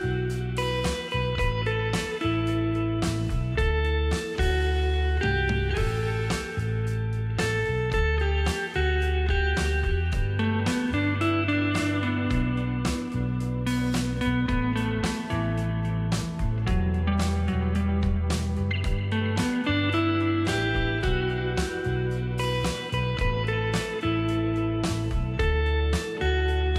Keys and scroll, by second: 14.2 shift+t, 19.3 space, 21.2 space, 22.5 t, 23.9 ctrl+x, 24.9 space.